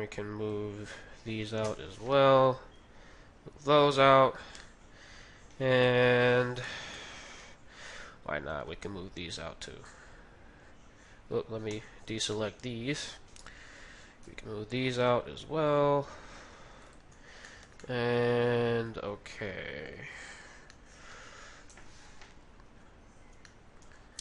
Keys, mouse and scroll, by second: 1.2 a, 1.2 b, 1.6 KP_3, 2.8 g, 4.6-8.8 middle drag, 5.9 KP_3, 7.4 z, 8.5 b, 9.5 z, 9.5 b, 11.0-15.4 middle drag, 11.7 b, 14.2 g, 17.1-19.8 middle drag, 17.8 z, 20.3-24.2 middle drag, 21.6 KP_3.